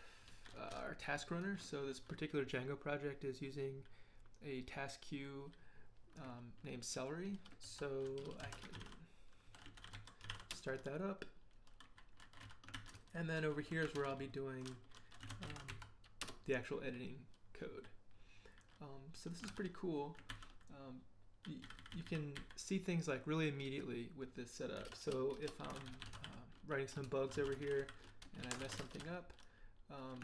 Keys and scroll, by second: 7.4-10.8 typing, 12.7 ctrl+h, 13.9 ctrl+p, 15.0-16.2 typing, 16.2 Return, 19.5 ctrl+l, 20.3 ctrl+h, 21.6 j, 21.8 j, 22.4 j, 24.8-29.3 typing, 24.8 Return, 25.3 Return, 28.4 ctrl+[, 29.3 Return.